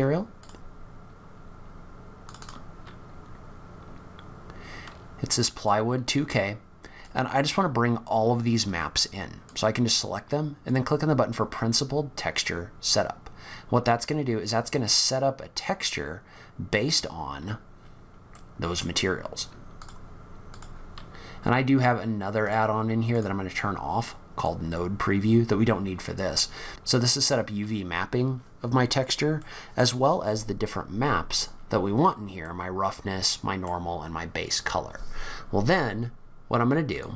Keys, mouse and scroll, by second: 37.0 click, 37.0 scroll down 4.